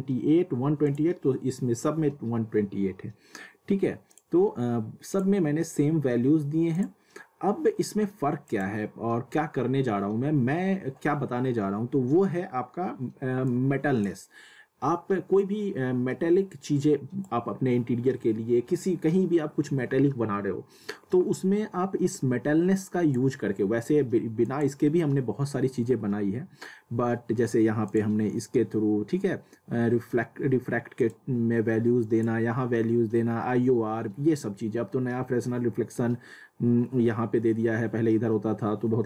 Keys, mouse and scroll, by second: 4.1 click, 7.0 click, 13.4-19.4 drag, 22.8 click, 27.8 click, 31.0 click.